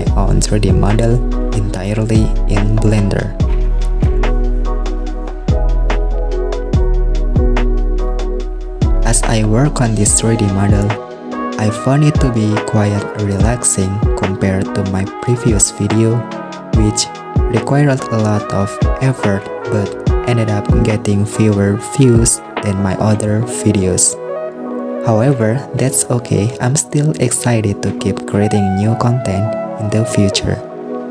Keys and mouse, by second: 0.1 click, 0.2 shift+middle click, 0.5-1.6 drag, 3.7 shift+middle click, 4.0 right click, 5.0 shift+middle click, 5.4 super+r, 8.9 shift+click, 9.2 s, 10.6 click, 12.1 right click, 12.7 shift+click, 12.9 right click, 14.0 s, 16.2 shift+super+middle click, 16.4 super+r, 17.6 shift+middle click, 18.3 shift+middle click, 19.1 super+r, 19.9 s, 21.3 super+z, 21.6 super+r, 22.6 s, 24.4 shift+middle click, 24.7 super+r, 26.8 s, 29.7 click.